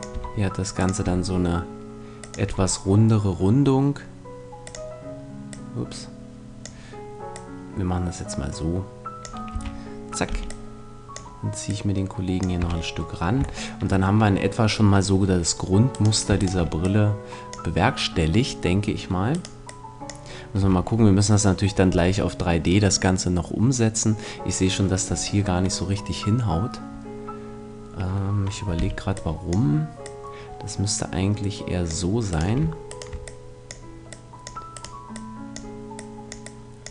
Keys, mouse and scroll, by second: 0.1 e, 1.0 e, 2.4 e, 4.7 click, 9.0 click, 9.5 a, 10.3 b, 11.6-13.6 drag, 12.6 a, 15.9-18.4 right drag, 16.8-18.6 drag, 19.3-21.0 right drag, 19.6-21.3 drag, 20.6 a, 25.1-28.8 middle drag, 28.8 b, 30.0-31.9 drag, 32.3-33.6 right drag, 33.2 click, 34.7 click, 36.5 click.